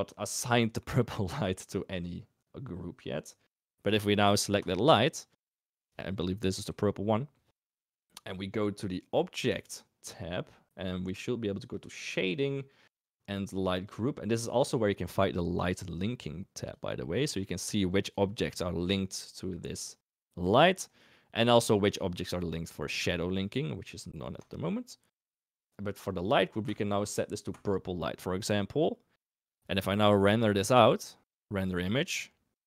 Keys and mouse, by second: 6.9 g, 9.4 click, 11.7 click, 13.6 click, 16.5 click, 21.5 click, 24.3 click, 25.6 drag, 26.7 click, 30.5 click.